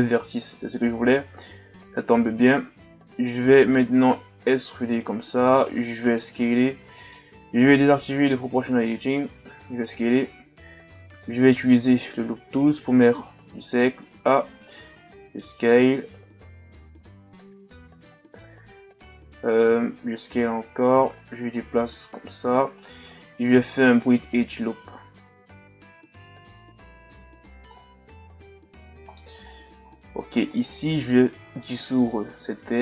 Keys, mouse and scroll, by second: 1.3-2.3 ctrl+scroll up 2, 2.3 alt+right click, 3.0-3.6 ctrl+scroll up 1, 4.2 e, 5.9 s, 8.1 o, 9.3 s, 11.0 w, 14.9 s, 19.4 scroll up 2, 19.9 s, 21.6-23.1 drag, 23.1-23.6 ctrl+scroll down 3, 24.0 alt+shift+right click, 24.9 ctrl+e, 27.7-28.3 scroll down 1, 28.3-29.0 scroll down 6, 29.1-29.5 scroll up 1, 29.5 shift+scroll down 2, 29.8-30.3 scroll up 3, 30.5 alt+right click, 31.5 x.